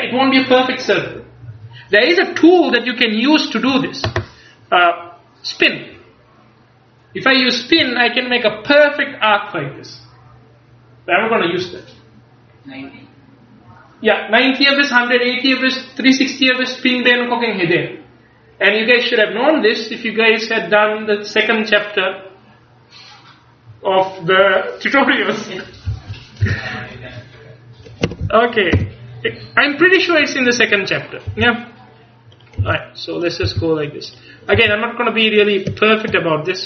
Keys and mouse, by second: 26.5 c, 28.8 e, 30.9-32.4 drag, 31.4 r, 32.7 e, 33.5 r, 34.6 g.